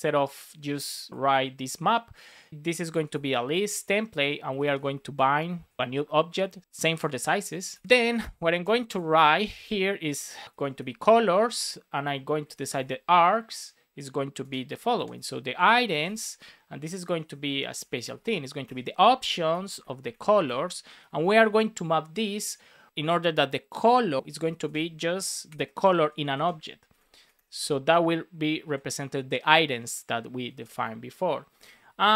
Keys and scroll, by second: 2.9 shift+l, 3.7 Return, 4.9 shift+9, 5.5 shift+[, 7.6 super+v, 8.4 super+c, 9.4 Return, 10.5 shift+c, 11.5 Return, 14.3 space, 15.1 shift+[, 15.4 Return, 17.0 shift+;, 17.2 space, 18.6 Return, 20.4 Return, 21.2 shift+9, 24.2 space, 25.4 shift+9, 25.9 shift+[, 26.3 space, 27.5 space, 28.5 super+s, 30.4 Right, 31.4 Down, 32.0 shift+super+Left.